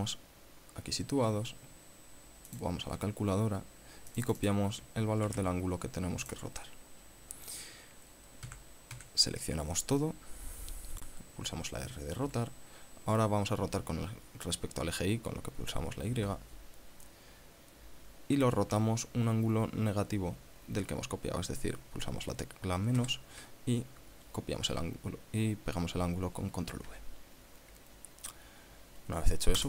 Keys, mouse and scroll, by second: 3.0 click, 4.6 click, 5.7 ctrl+c, 6.8 click, 8.9 a, 9.4 a, 12.7 r, 16.6 y, 23.4 KP_Subtract, 27.3 ctrl+v.